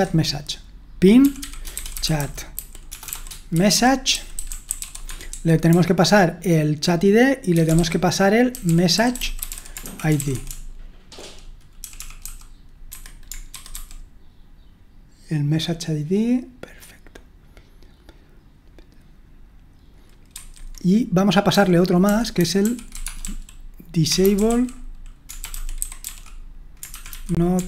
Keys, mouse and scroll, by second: 1.0-13.5 typing, 12.9 Escape, 13.5 super+1, 13.8 super+2, 15.4 typing, 20.4 super+1, 21.3-27.6 typing.